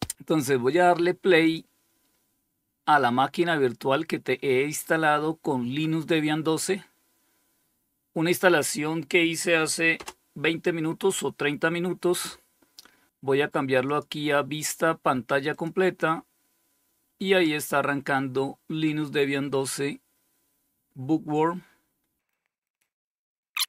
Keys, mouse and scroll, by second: 0.7 click, 9.2 Return, 13.1 click, 14.7 click.